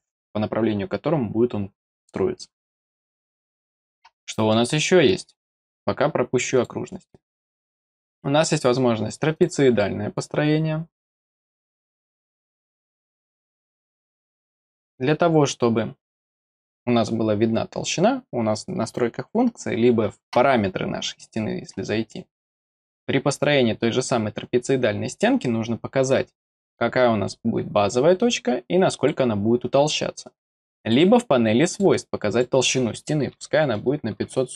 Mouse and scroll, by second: 3.6 scroll down 1, 4.2 middle click, 6.5 click, 9.3 click, 10.1 click, 11.6 click, 12.6 middle click, 13.1 middle click, 14.9 click, 21.1 click, 26.1 click, 28.7 click, 30.8 click, 31.7 click, 32.1 click.